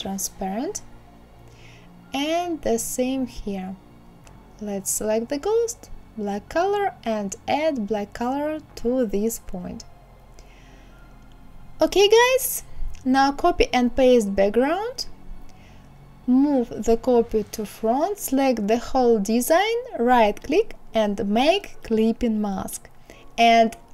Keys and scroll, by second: 12.8 ctrl+c, 13.6 ctrl+f, 17.1 ctrl+a.